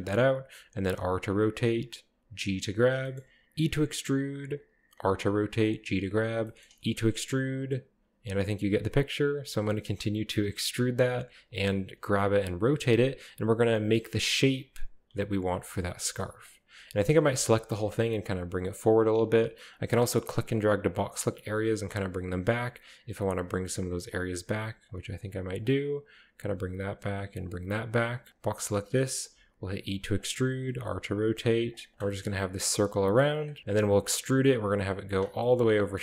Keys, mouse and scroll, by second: 0.0 click, 0.8 r, 1.7 click, 2.2 typing, 2.8 click, 3.2-3.6 shift+middle drag, 3.6 typing, 4.5 click, 5.0-6.8 typing, 5.6 click, 5.8-7.2 drag, 6.5 shift+middle click, 7.7 click, 7.9-10.3 typing, 8.3 click, 8.8 click, 10.0 click, 11.0 click, 11.3-17.7 typing, 11.5 click, 12.3 click, 13.2 click, 14.0 click, 14.7-16.2 drag, 18.8 click, 19.7-20.4 drag, 20.8-21.2 drag, 21.3 typing, 21.9 drag, 22.2-22.5 drag, 22.9-23.3 drag, 23.5 typing, 23.8 drag, 24.1-24.5 drag, 24.6-25.4 typing, 24.9 drag, 25.3 click, 25.9 click, 26.5-27.2 typing, 27.4 click, 27.9 click, 28.3 click, 28.3 typing, 29.7-32.6 typing, 30.2 click, 31.2 click, 31.7-32.8 shift+drag, 33.4 click, 33.6-34.2 scroll down 1, 34.4 e, 35.1-35.7 drag, 35.4-36.0 middle drag.